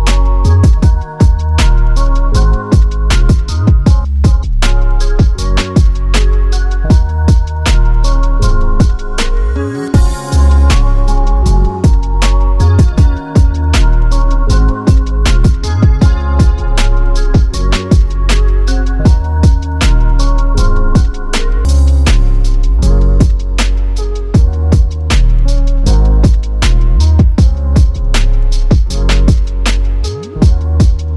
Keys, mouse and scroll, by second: 1.3-1.9 typing, 3.9 click, 14.5 click, 16.4 click, 17.3 right click, 19.1 click, 19.9-20.6 scroll up 1, 20.6 click, 26.6 space.